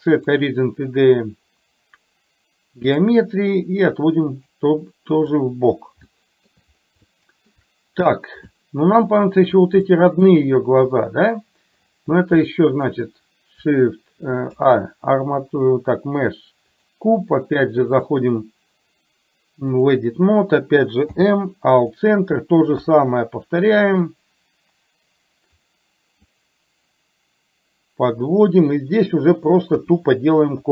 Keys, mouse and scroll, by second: 4.1-5.3 drag, 6.1 shift+middle click, 7.1 shift+middle click, 8.6 shift+middle click, 10.1 shift+middle click, 12.6 shift+middle click, 14.4 shift+a, 18.1-20.1 drag, 21.1 m, 22.8 KP_3, 23.9-25.7 drag, 26.5-28.2 drag, 29.8 KP_1.